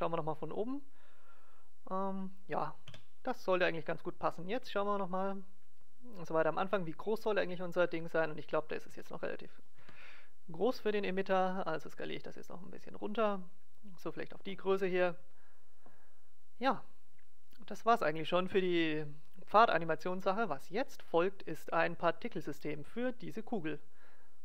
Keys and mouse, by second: 2.9 KP_0, 4.8 click, 9.0 s, 10.5-12.2 right drag, 11.1 s, 14.1-15.9 drag, 17.5-19.1 drag.